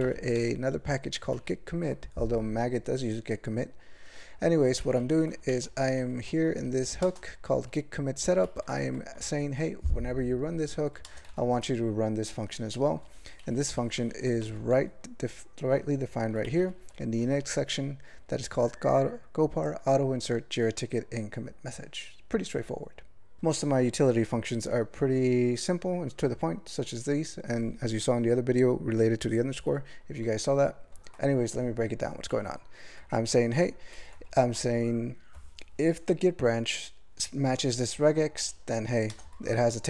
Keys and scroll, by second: 0.0 alt+m, 0.3 ctrl+l, 1.3 ctrl+e, 4.8 ctrl+n, 5.0 ctrl+n, 5.5 alt+m, 5.9 alt+f, 6.1 alt+f, 6.5 alt+b, 7.0 ctrl+space, 7.3 ctrl+alt+f, 8.4 ctrl+g, 8.8 alt+f, 9.2 alt+b, 11.0 ctrl+space, 11.3 ctrl+alt+f, 13.0 ctrl+g, 13.4 ctrl+n, 13.6 ctrl+n, 13.8 ctrl+n, 14.0 ctrl+n, 14.4 alt+m, 14.7 ctrl+l, 16.2 ctrl+e, 16.4 alt+m, 16.6 alt+f, 16.8 alt+f, 17.2 alt+b, 33.0 ctrl+n, 33.5 ctrl+f, 34.3 alt+f, 34.6 alt+b, 39.1 ctrl+space, 39.3 ctrl+alt+f.